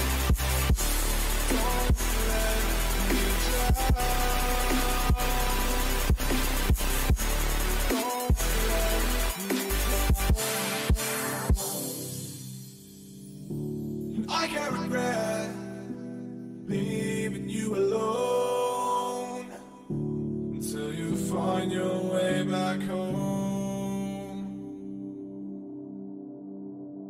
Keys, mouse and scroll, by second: 3.5-5.3 right drag, 4.1-6.1 middle drag, 9.3-12.5 drag, 12.5-15.1 middle drag, 14.9-17.2 drag, 18.3-21.9 middle drag.